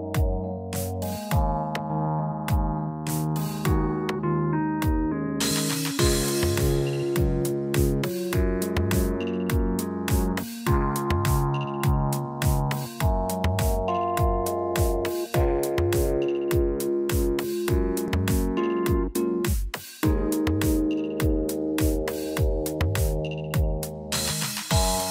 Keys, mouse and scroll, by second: 1.0 shift+click, 3.5 scroll down 3, 3.8 middle click, 4.3 scroll down 2, 5.0 scroll down 2, 5.6 click, 5.9 middle click, 7.0 shift+middle click, 7.6 middle click, 8.1 click, 10.0 middle click, 10.3-10.8 scroll up 9, 11.0 shift+middle click, 12.9 click, 15.4 middle click, 16.3-17.0 scroll down 7, 16.9 shift+middle click, 18.7 middle click, 19.5 scroll up 1, 20.2 middle click, 20.2 scroll up 4, 22.5 scroll down 4, 23.0 shift+middle click, 24.2 scroll down 2, 24.5 middle click.